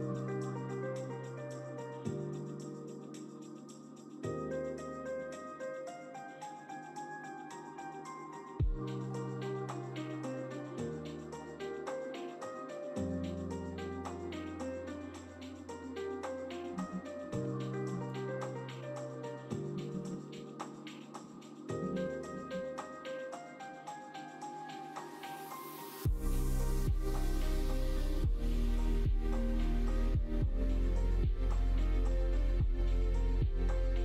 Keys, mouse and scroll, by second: 0.1 shift+middle click, 0.7 middle click, 2.7 middle click, 3.1 ctrl+r, 4.9 middle click, 5.1 ctrl+r, 6.6 middle click, 7.2 middle click, 8.2 click, 9.0 3, 9.3 click, 10.0 middle click, 11.5 middle click, 12.6 shift+click, 13.0 middle click, 13.9 ctrl+click, 15.3 click, 16.2 middle click, 16.6 ctrl+z, 16.9 middle click, 17.3 ctrl+z, 18.1 alt+click, 18.8 alt+shift+click, 19.7 ctrl+z, 19.9 ctrl+z, 20.0 ctrl+z, 20.2 ctrl+z, 20.3 ctrl+z, 20.4 ctrl+z, 20.8 ctrl+z, 21.1 ctrl+z, 21.8 ctrl+z, 21.9 ctrl+z, 22.1 ctrl+z, 22.3 ctrl+z, 23.4 middle click, 23.7 Tab, 24.1 middle click, 24.6 middle click, 25.3 ctrl+s, 26.5 middle click, 26.9 click, 27.8 click, 28.8 q, 30.8-31.9 middle drag, 32.1 shift+middle click, 32.5 middle click, 32.8 q.